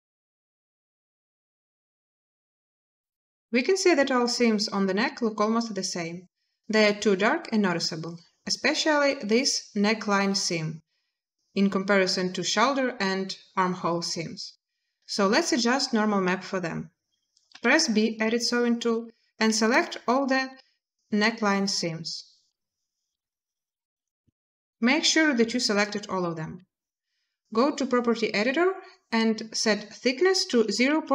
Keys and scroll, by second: 17.3 b, 30.2-30.9 typing.